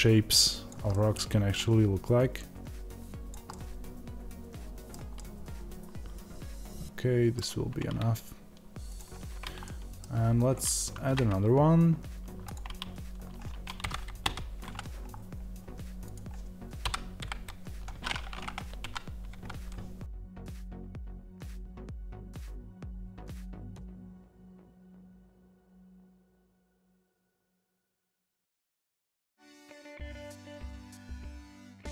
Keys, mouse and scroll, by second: 9.9 scroll down 1, 12.4 shift+a, 13.7 KP_Divide, 15.0-15.9 scroll down 1, 15.9-21.3 drag, 21.3 Tab, 23.9 click, 25.0 click, 25.1-26.1 middle drag, 25.4 g, 26.1 click, 26.4 g, 26.4 click, 26.5 middle click, 26.8 click, 26.8 g, 27.0 click.